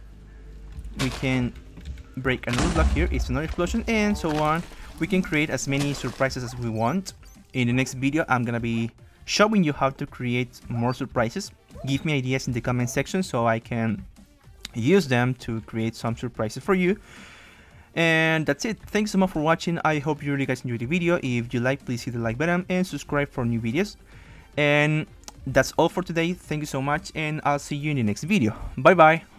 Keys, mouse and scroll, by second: 0.8 right click, 0.8 d, 1.1-2.8 drag, 1.4 s, 2.5-4.2 typing, 4.2 right click, 4.6-6.1 drag, 6.3-9.3 typing, 11.3 space, 12.7 d, 12.7 space, 13.1 space, 16.3 w, 17.1 space, 18.8 space, 20.9 space, 21.5 space, 23.1 space, 26.9 w.